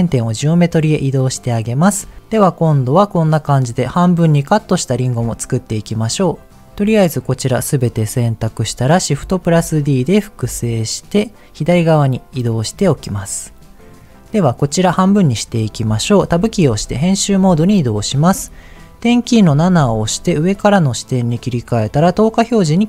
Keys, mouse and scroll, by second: 1.0-2.0 scroll up 3, 2.0 r, 6.1 click, 6.5 click, 9.3 shift+d, 10.3 x, 11.6 click, 12.5 shift+middle click, 12.7-13.5 scroll up 2, 13.8 click, 14.4 middle click, 15.4 middle click, 16.2 Tab, 19.6 KP_7, 21.9 click.